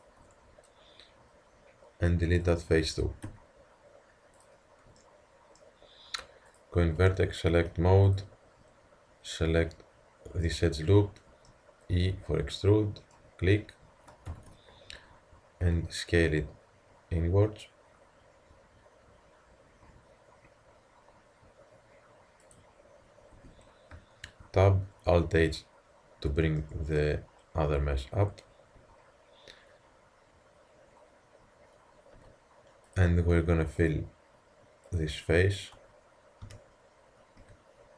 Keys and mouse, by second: 0.0-1.6 drag, 0.2 Tab, 2.5-4.2 drag, 3.2 x, 5.0 middle click, 6.5-10.5 drag, 12.1 e, 14.3 ctrl+KP_3, 15.7 s, 23.4 Tab, 24.3 alt+h, 26.6 drag, 28.8 Tab, 28.8-32.0 drag, 32.2 z, 32.9-37.2 drag, 36.5 f, 37.4 z.